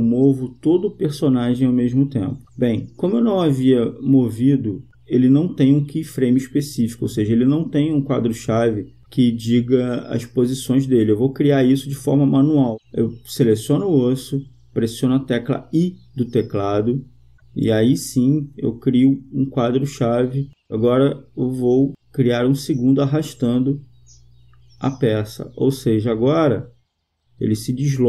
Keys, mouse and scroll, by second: 2.6-4.2 right drag, 9.1-10.1 drag, 10.2-11.3 drag, 15.3 i, 23.8-25.2 right drag, 24.9-26.7 drag, 26.9-28.0 right drag.